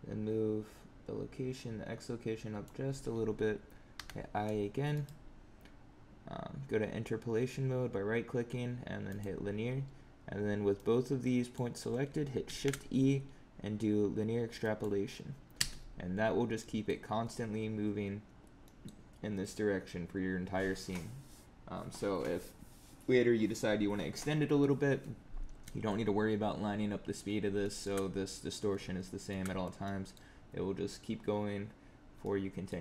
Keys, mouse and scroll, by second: 3.9 i, 4.8 right click, 10.7 click, 12.4 shift+e, 15.5 space, 16.3 scroll down 2, 16.5 middle click, 18.2 scroll down 2, 18.6 middle click, 26.5 scroll up 4, 27.5 shift+middle click, 29.0 shift+middle click, 29.5 scroll down 2, 29.7 middle click, 32.1 middle click.